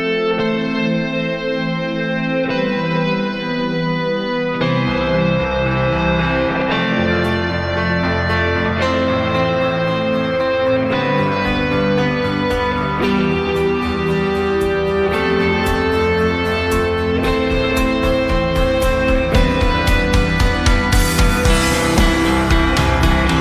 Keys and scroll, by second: 8.0 s.